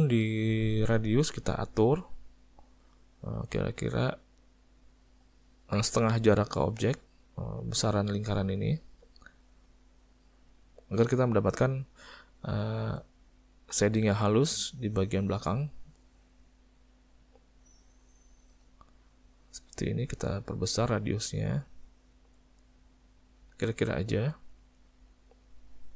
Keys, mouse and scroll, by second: 1.8 click, 3.3 click, 15.3 click, 17.7 click, 20.7 click, 23.4 click, 24.9 middle click, 25.8 click.